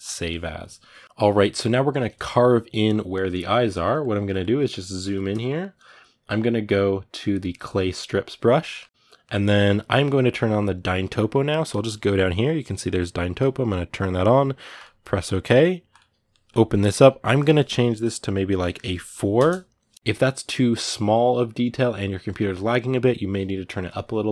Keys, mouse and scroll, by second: 0.7-7.1 middle drag, 7.1 click, 8.0 middle click, 8.9 f, 9.0-24.3 middle drag.